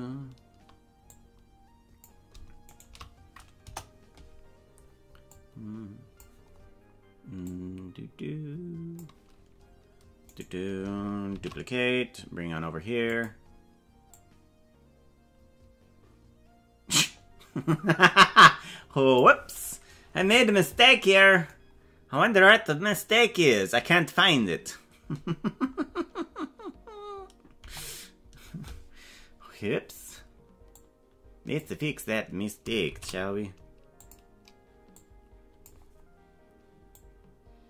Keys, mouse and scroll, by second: 0.0 right click, 1.0-2.2 drag, 3.2 shift+right click, 3.6 KP_0, 5.3 click, 7.4-9.0 drag, 10.2 right click, 11.3 shift+d, 14.1-19.2 drag, 20.1 KP_Decimal, 27.6 KP_0, 30.7 click, 32.9 shift+d, 34.9 click, 37.1-37.6 drag.